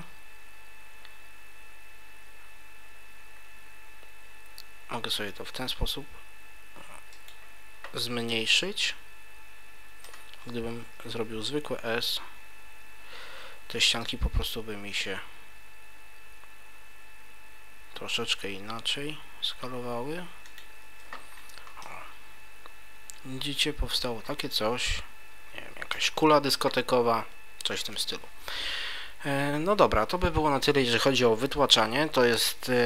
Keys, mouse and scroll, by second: 7.2 click, 8.3 middle click, 10.6 ctrl+z, 11.9 s, 20.6 click, 20.8 Tab, 21.3-22.7 scroll up 3, 21.8 middle click, 24.2-24.9 scroll down 2, 24.9 middle click, 24.9-25.4 scroll down 1.